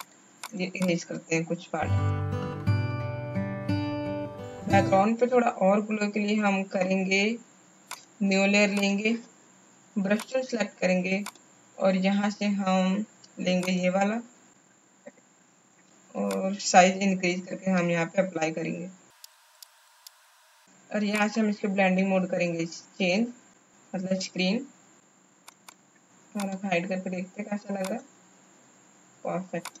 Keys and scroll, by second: 2.3 x, 2.6 ctrl+z, 2.7 ctrl+z, 3.1 space, 3.7 space, 15.9 b.